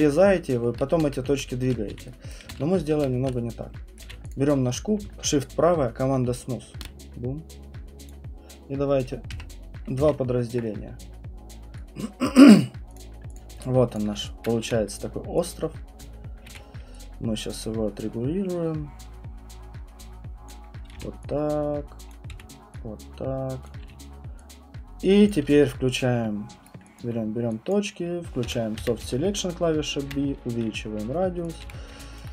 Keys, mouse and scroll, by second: 0.0 ctrl+middle click, 0.7 ctrl+middle click, 1.0 ctrl+z, 1.3 ctrl+z, 1.9 q, 2.3 right click, 2.5 ctrl+z, 2.9 ctrl+z, 3.9 right click, 4.0 q, 4.3 click, 6.8 shift+right click, 8.1 click, 9.3 2, 10.0 Return, 11.5 alt+click, 12.4 right click, 12.4 KP_2, 12.6 click, 12.9 click, 13.1 alt+click, 13.3 click, 13.5 alt+click, 13.9 alt+click, 14.4 click, 14.6 r, 16.0 click, 16.5 w, 20.5 click, 20.9 r, 22.1 click, 22.3 w, 23.6 click, 23.8 q, 25.3 alt+click, 25.4 q, 26.6 right click, 27.0 alt+click, 27.7 click, 28.4-30.1 typing, 30.1 middle click, 31.5 click, 31.6 w, 32.2 click.